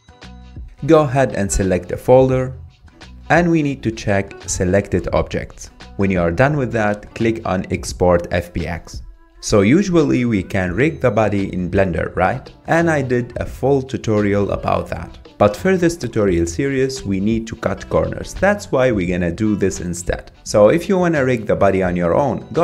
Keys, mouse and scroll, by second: 9.2 s, 9.7 alt+z, 9.9 click, 10.6 scroll down 2, 10.9 click, 11.1 click, 11.4 Tab, 11.4 ctrl+p, 12.7 click, 12.7 scroll up 2, 12.8 middle click, 12.9 click, 13.2 click, 13.4 scroll down 2, 13.5 middle click, 13.6 click, 13.9 r, 14.1 middle click, 14.2 shift+click, 14.3 ctrl+Tab, 14.7 click, 14.9 shift+middle click, 16.0 middle click, 16.1 ctrl+click, 16.2 ctrl+click, 16.6 ctrl+click, 16.8 ctrl+click, 16.9 middle click, 17.2-17.7 scroll up 4, 17.4 middle click, 17.7 shift+middle click, 18.0 click, 18.3 middle click, 18.7 scroll up 2, 18.9 Tab, 19.3 click.